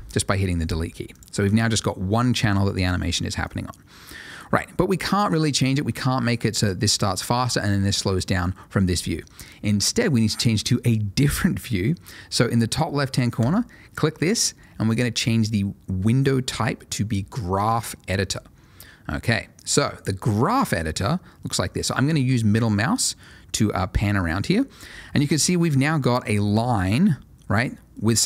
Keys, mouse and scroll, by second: 1.1 click, 3.4 click, 13.4 click, 18.3 click, 20.8 middle click, 28.1 click.